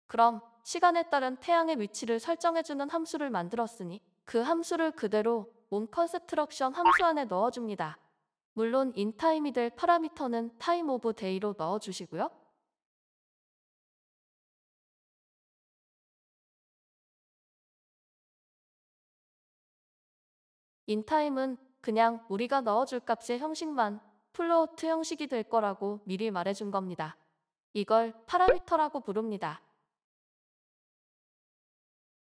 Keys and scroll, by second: 20.0 Tab, 20.0 typing.